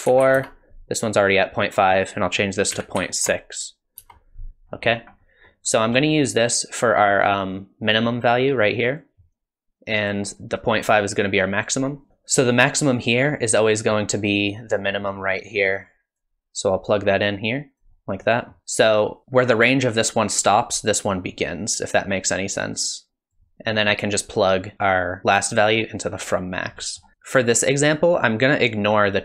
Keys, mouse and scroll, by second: 4.8 scroll up 3, 5.2 middle click, 7.9 click, 10.1 click, 12.1 click, 16.9 click, 18.2 middle click, 22.6 click, 23.5 middle click, 26.8 middle click.